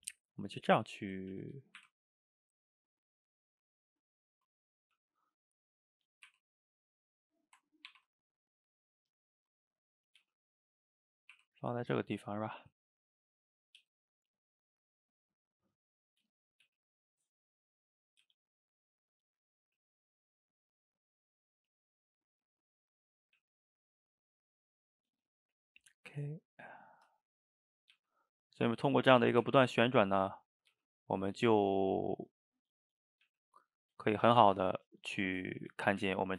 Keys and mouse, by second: 1.4 a, 4.4 middle click, 5.0 g, 5.5 middle click, 6.3 r, 7.9 ctrl+t, 9.3 middle click, 10.2 g, 12.2 middle click, 12.6 g, 13.4 middle click, 13.8 g, 14.3-16.1 middle drag, 16.1 click, 16.3 shift+click, 16.7 g, 17.5 middle click, 18.3 g, 19.1 middle click, 19.7 g, 20.9 middle click, 21.6 click, 21.8 shift+click, 22.0 shift+click, 22.7 shift+click, 22.9 middle click, 23.4 g, 24.3-25.1 middle drag, 25.1 g, 26.1 click, 26.3 shift+click, 26.5 shift+click, 26.9-27.9 middle drag, 27.9 g, 28.9-29.5 middle drag, 29.5 r, 30.7 g, 31.7-33.1 middle drag, 33.1 click, 33.3 g, 34.5-35.8 middle drag, 35.8 click, 36.1 g.